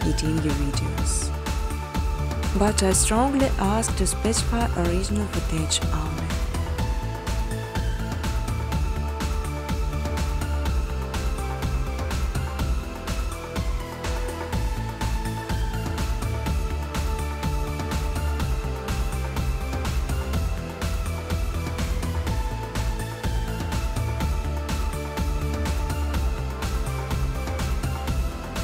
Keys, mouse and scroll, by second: 0.7 click, 3.6 click, 3.9-5.2 typing, 8.5 click, 8.7 click, 10.6 click, 11.6 click, 11.8 click, 13.2 click, 16.4 typing, 17.0 Tab, 18.3-19.1 typing, 19.8 Tab, 20.2 Tab, 20.5 Tab, 20.9 Tab, 21.6 Tab, 23.1 Tab, 24.9 Tab, 25.4 Tab, 26.5-28.2 typing.